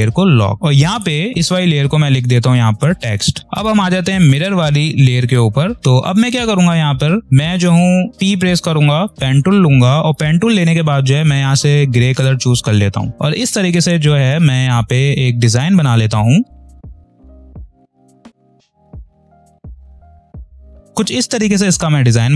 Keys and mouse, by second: 0.7 click, 2.1 t, 3.4 click, 8.4 p, 9.1 ctrl+=, 9.6 click, 10.0 space, 12.1 click, 13.1 space, 15.7 click, 16.6 space, 16.7 click, 16.7 space, 17.2 click, 17.4 space, 17.4 click, 17.5 space, 18.0 click, 20.0 space, 20.0 click, 20.1 space, 20.4-22.3 drag.